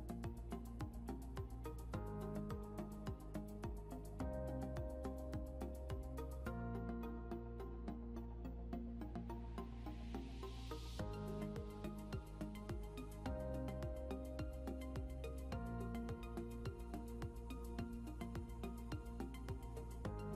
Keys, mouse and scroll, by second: 1.4 double click, 2.2-2.9 typing, 4.4 scroll down 1, 5.8 typing, 6.1 scroll down 1, 7.0-7.9 typing, 7.1 scroll down 1, 8.7 ctrl+q, 15.3 Delete, 15.8 scroll down 1, 16.0 scroll up 1.